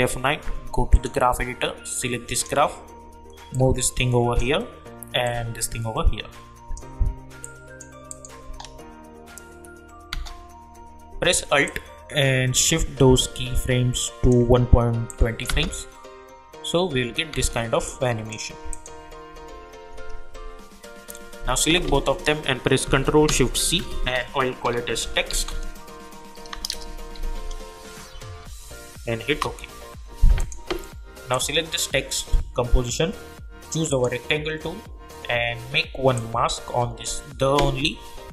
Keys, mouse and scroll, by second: 5.2-7.4 drag, 7.4 click, 8.4 space, 11.6-15.5 alt+drag, 15.5 space, 17.8 click, 19.3 u, 21.8 ctrl+a, 23.6 ctrl+shift+c, 24.7-25.9 typing, 27.1 shift+x, 28.4 shift+t, 29.3 Return, 30.4 click, 33.9 click, 36.1-38.3 drag.